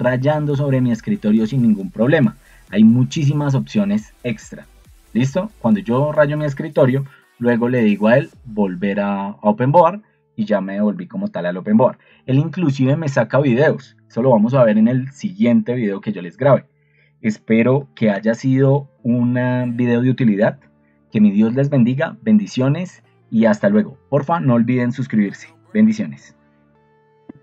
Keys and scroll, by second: 7.2 ctrl+2, 9.1 Escape, 18.2 ctrl+alt+1, 26.6 ctrl+End.